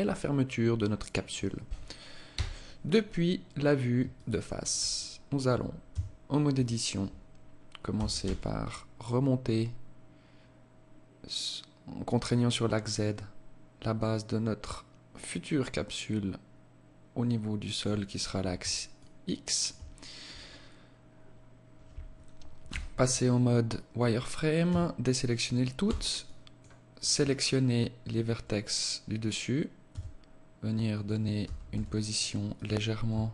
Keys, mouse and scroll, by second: 1.9 KP_1, 3.8 alt+shift+click, 4.6-5.3 scroll up 2, 5.5 Tab, 7.5 g, 18.4 alt+shift+click, 22.1 z, 24.1 a, 25.3 b, 29.3 s, 30.8 g, 32.5 s.